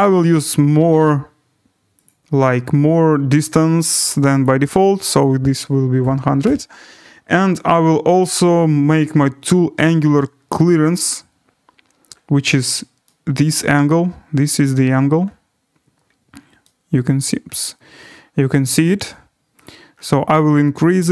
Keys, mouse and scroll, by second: 0.0-0.7 scroll, 1.5 scroll, 2.1 click, 2.3-2.9 scroll, 3.4-4.4 scroll, 4.4 click, 5.2 click, 5.3 1, 6.0 0, 6.4 0, 9.0 click, 9.7-11.1 scroll, 11.3-13.5 scroll, 13.5 right click, 15.2 scroll, 17.2 right click, 17.4 middle click, 17.5 middle click, 17.6 middle click, 18.1 middle click, 18.3 middle click, 18.7-19.5 scroll, 19.6 click, 19.8-21.1 scroll.